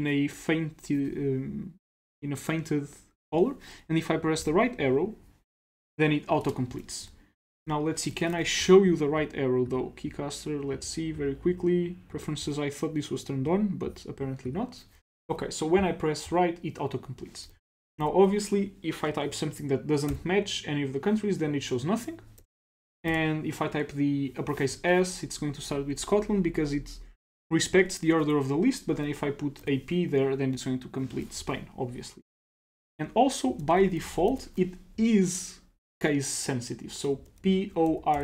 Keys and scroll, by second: 15.3 Right, 17.5-18.2 typing, 20.1 typing, 21.5-23.1 typing, 29.6 p, 33.6-34.4 typing, 36.9-38.2 typing.